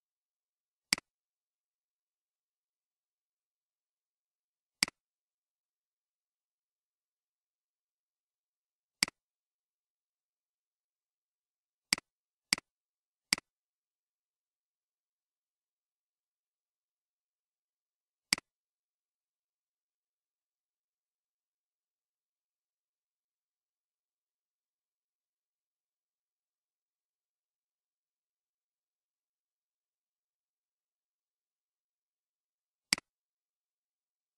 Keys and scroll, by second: 1.0 typing, 3.0-3.4 typing, 5.4-9.0 typing, 11.7-12.4 typing.